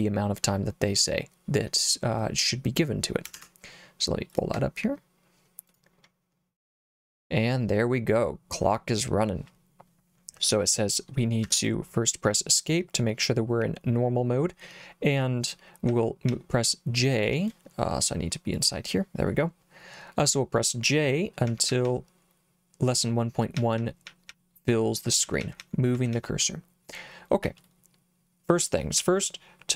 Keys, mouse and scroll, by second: 3.4 alt+Tab, 4.3 alt+click, 5.7 click, 8.1 click, 11.4 Escape, 15.9 j, 16.3 j, 16.5 j, 18.6 click, 21.5 j, 21.7 j, 21.8 j, 23.6-26.2 typing, 27.4 k, 29.0 k.